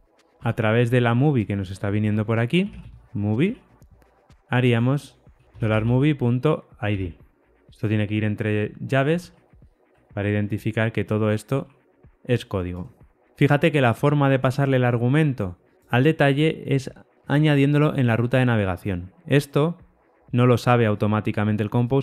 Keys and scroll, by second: 0.3 Tab.